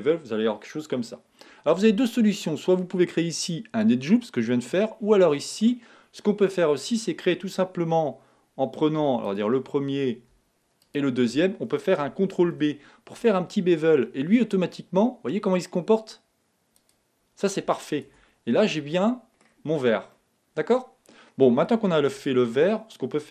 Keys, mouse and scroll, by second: 3.2-5.9 middle drag, 5.9-9.1 scroll up 3, 9.4 alt+click, 10.9 alt+shift+click, 12.5 ctrl+b, 18.6 Tab, 18.9 middle click, 19.7-20.2 scroll down 4, 20.2-22.5 middle drag, 22.5 Tab.